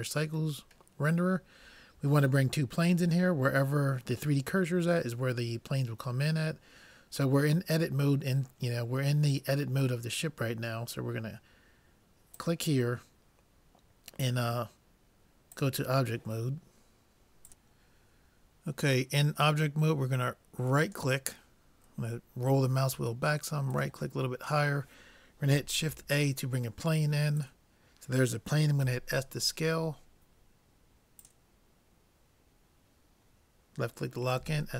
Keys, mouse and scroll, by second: 12.4-14.1 drag, 20.9-22.5 right drag, 23.7-25.5 right drag, 25.9 shift+a, 28.8 s, 34.4 s.